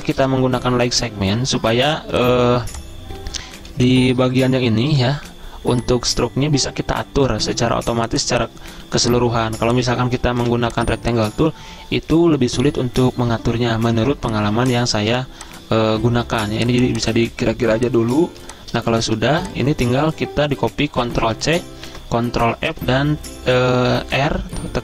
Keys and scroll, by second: 0.1 v, 0.9 d, 3.5-4.9 typing, 8.9 z, 10.1-10.9 typing, 13.9 typing, 15.1 typing, 18.3-19.1 typing, 21.2 ctrl+c, 21.9 ctrl+f, 24.1 r.